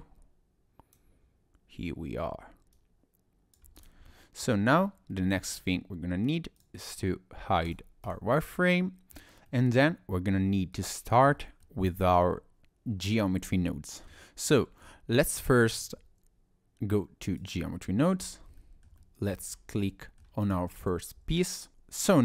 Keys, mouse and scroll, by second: 2.7 click, 3.8 click, 4.1 middle click, 4.7-5.1 scroll up 2, 5.1 middle click, 5.6-6.4 scroll down 2, 6.4 scroll down 1, 6.6 click, 8.1 click, 8.3 middle click, 8.3-8.6 scroll up 1, 9.2 scroll down 1, 9.5 middle click, 11.6 middle click, 13.5 shift+middle click, 14.0 middle click, 14.9 shift+middle click.